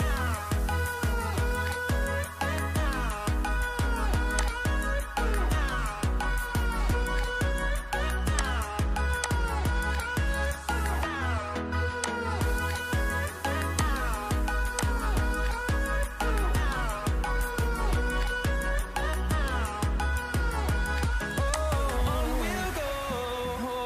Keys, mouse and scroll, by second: 1.5-2.4 typing, 4.2 typing.